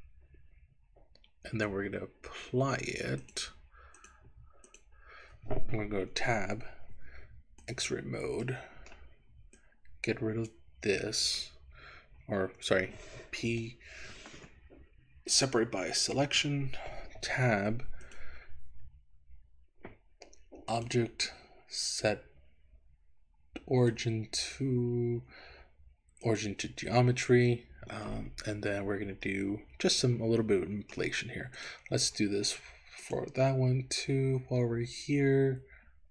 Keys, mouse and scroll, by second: 3.2-4.2 drag, 4.7 click, 6.2 Tab, 7.6 click, 8.5 middle click, 9.5-10.6 drag, 17.4 Tab, 18.1 click, 20.7-26.5 drag, 29.3-31.1 middle drag, 31.6 click, 33.0-36.1 drag.